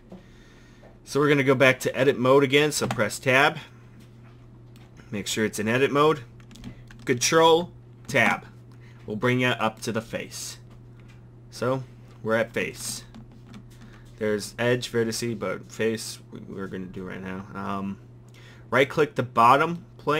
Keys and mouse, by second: 2.9 Tab, 8.1 ctrl+Tab, 13.2 ctrl+Tab, 18.9-20.1 drag.